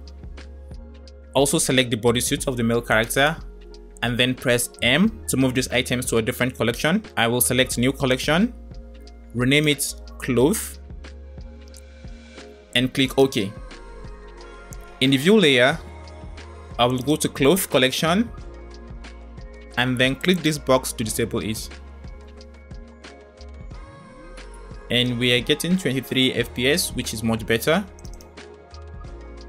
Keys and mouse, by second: 3.0 shift+click, 4.8 m, 20.4-22.1 drag, 24.3 space.